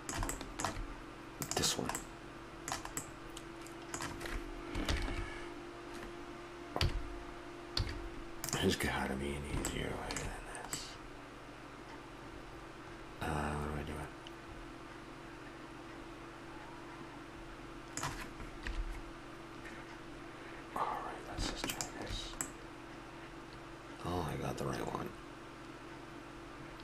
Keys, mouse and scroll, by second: 2.1-3.3 middle drag, 6.7 KP_3, 7.8 z, 12.5 middle click, 18.6 KP_3, 22.4 middle click, 23.6 middle click.